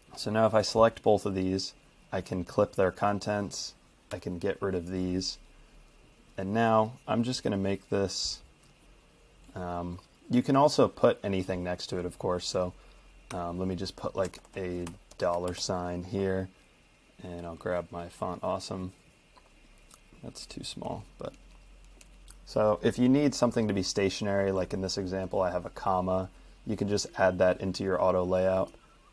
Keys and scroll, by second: 4.1 BackSpace, 12.6-15.2 typing.